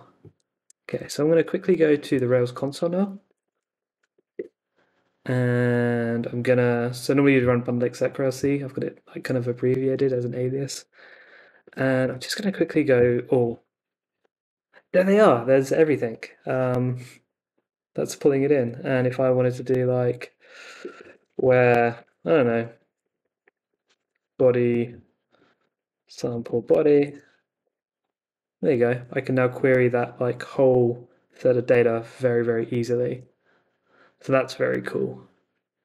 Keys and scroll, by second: 1.0 super+c, 1.3 super+Tab, 2.5 super+t, 3.0-4.7 typing, 11.6 super+v, 11.7-12.9 typing, 12.9 Return, 18.5 super+Tab, 20.8-27.5 typing, 22.3 Left, 23.2 Left, 24.8 Right, 27.6 Return.